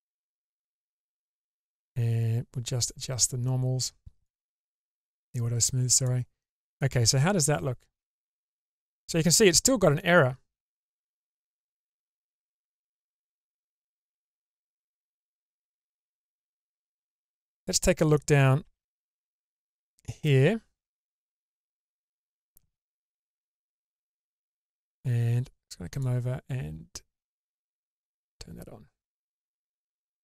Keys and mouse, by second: 0.6 shift+space, 2.8-3.7 drag, 4.3-6.1 drag, 6.8-8.0 middle drag, 8.3 shift+middle drag, 9.3-13.6 middle drag, 12.9 click, 13.7 Tab, 14.3 Tab, 15.9 middle click, 17.1 click, 18.7 1, 19.3 middle click, 22.3 click, 23.8 middle click, 27.6 click, 28.2-30.2 middle drag.